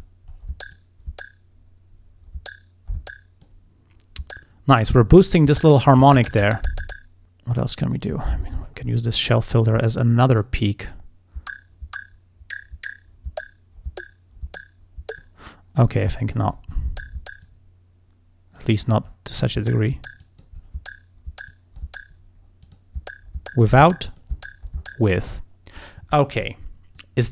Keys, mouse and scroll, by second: 0.0-0.6 scroll up 2, 0.8-3.7 drag, 7.5 click, 9.6-10.1 scroll up 2, 10.2 scroll up 1, 10.5-15.4 drag, 15.9-17.0 scroll down 1, 17.0 scroll down 1, 17.5-18.8 drag, 19.1 scroll up 2, 20.3 click, 20.6 scroll up 2, 21.5 click, 22.7 click, 24.2 click, 27.0 click.